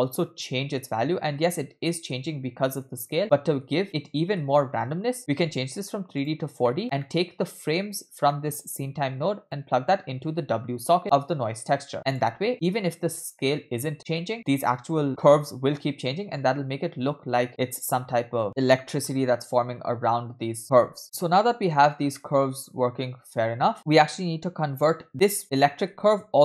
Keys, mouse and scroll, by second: 1.4-4.4 typing, 3.2-3.6 scroll down 2, 4.9 scroll up 2, 5.2-6.3 drag, 6.7 middle click, 6.8 scroll down 2, 7.0 middle click, 8.1 scroll down 1, 8.3-8.7 middle drag, 9.6-12.3 drag, 12.9 middle click, 13.9 scroll up 1, 14.2 space, 18.4 space, 20.6 space, 21.0 middle click, 21.0-21.4 scroll down 5, 21.4 space, 21.8-23.7 scroll down 2, 22.2-23.7 middle drag, 23.7 space, 24.8-25.2 scroll up 3, 25.3 middle click, 25.4 space, 25.6-25.9 scroll up 3, 25.9 space.